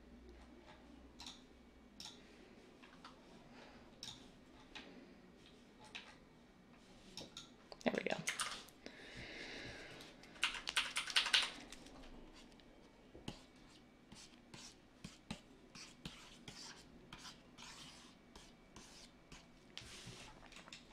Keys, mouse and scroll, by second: 8.3 ctrl+z, 10.4-11.3 typing.